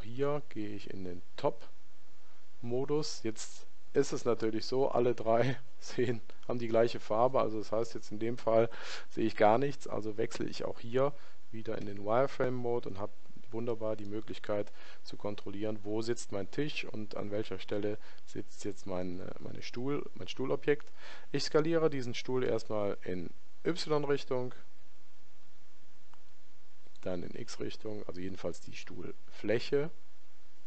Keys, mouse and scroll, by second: 3.3-5.4 middle drag, 11.7 z, 12.7-15.5 middle drag, 27.3 s.